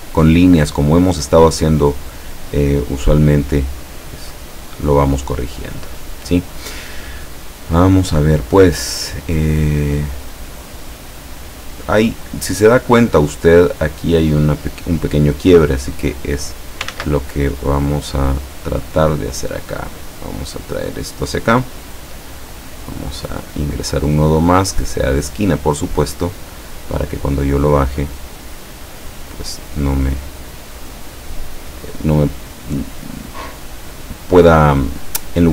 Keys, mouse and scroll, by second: 4.1-6.7 drag, 16.0 click, 17.0 ctrl+z, 17.6-22.1 ctrl+drag, 23.1 click, 25.1 click, 26.9-29.4 drag, 29.9-32.1 drag, 32.8-34.2 drag.